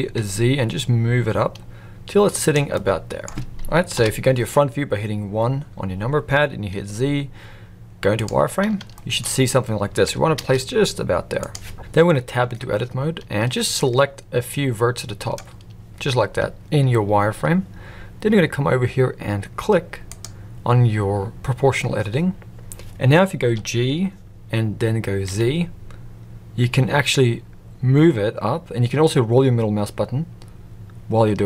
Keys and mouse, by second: 2.7-3.3 middle drag, 3.9 KP_1, 6.7 z, 8.9 shift+middle click, 10.0 g, 12.4 Tab, 13.7-15.3 drag, 20.0 click, 23.4 g.